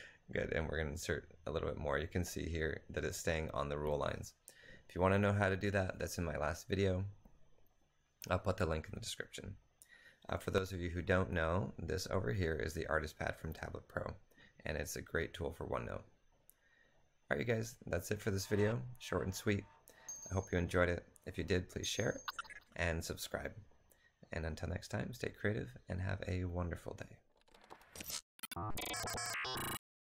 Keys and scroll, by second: 0.0 Return, 1.2 typing.